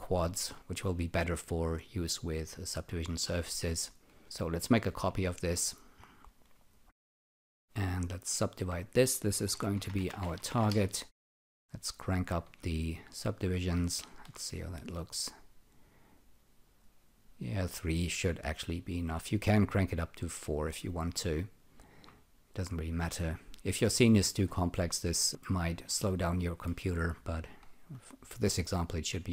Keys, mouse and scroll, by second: 0.3 alt+middle click, 4.6 ctrl+click, 7.2 alt+click, 9.5-10.9 typing, 14.0 alt+shift+click, 16.1 click, 19.8 click, 21.3 alt+click, 25.4 alt+middle click.